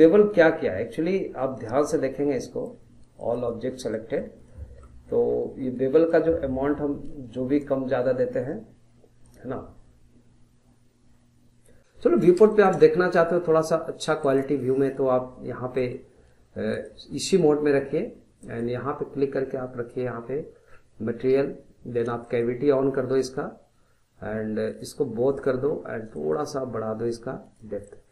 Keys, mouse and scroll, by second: 0.7-1.5 scroll up 1, 1.5 middle click, 2.2 scroll down 1, 2.4 middle click, 3.2 click, 3.6 scroll down 1, 3.9-6.1 middle drag, 6.1-9.1 drag, 11.8 middle click, 11.8 scroll up 1, 12.0-15.0 shift+middle drag, 15.0 click, 15.7-16.7 middle drag, 16.7 click, 17.2-18.4 middle drag, 18.4-21.5 drag, 27.9-28.1 middle drag.